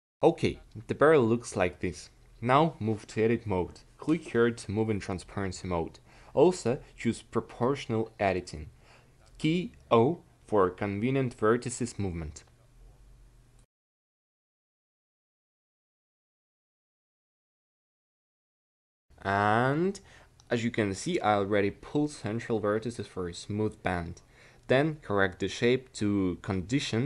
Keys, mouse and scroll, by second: 1.9 a, 2.2 c, 4.2 o, 5.6-6.9 drag, 7.7 c, 8.7 click, 16.6 a, 17.0 c, 18.1 q, 19.7 a, 19.9 c, 22.8 ctrl+z, 23.6 a, 24.8 o, 25.7 c, 26.7-27.0 drag.